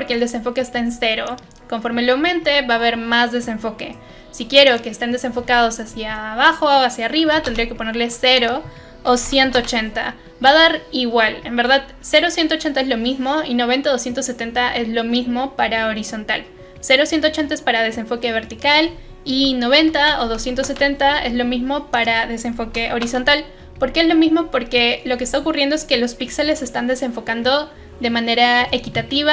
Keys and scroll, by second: 7.3 0, 7.4 Return, 8.9-9.9 typing, 19.7-20.9 typing, 22.4-23.3 typing.